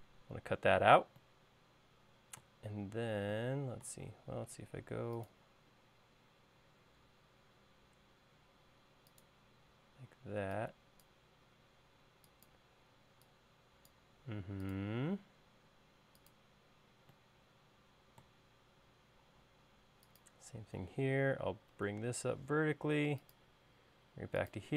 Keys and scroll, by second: 4.4 l, 9.6 e, 14.2 l, 19.1 l, 21.8 Up.